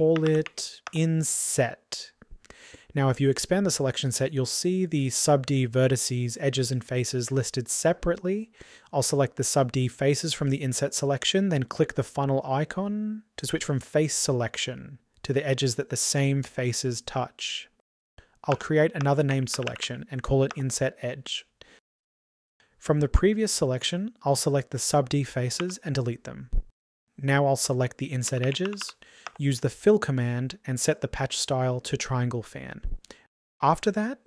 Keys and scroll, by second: 25.2 Delete.